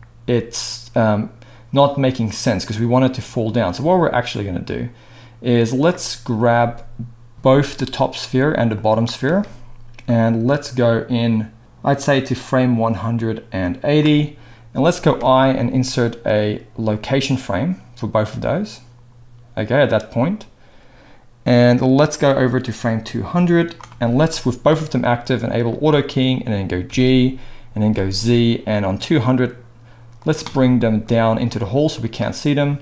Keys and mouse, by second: 7.9-8.8 middle drag, 8.8 shift+click, 8.9-10.1 shift+middle drag, 10.1-25.8 drag, 25.8-32.8 middle drag, 26.8 g.